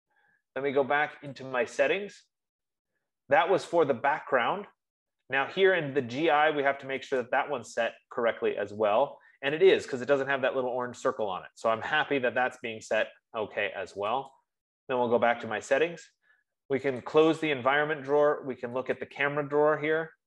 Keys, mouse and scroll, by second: 1.9-6.8 drag, 8.0-12.8 drag, 15.0 click, 17.6 click, 18.7 F15, 19.4 click.